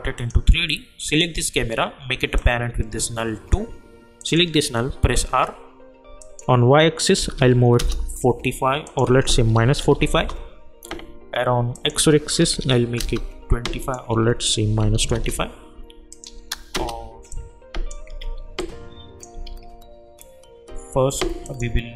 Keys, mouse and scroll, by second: 5.0 r, 6.2 click, 7.8 Return, 8.8 click, 9.5 -, 10.1 Return, 11.7 click, 13.0 Return, 13.8 click, 15.1 Return, 16.1 click, 16.7 Return, 17.3 click, 18.2 ctrl+z, 18.6 click, 19.4 ctrl+z, 21.4 click.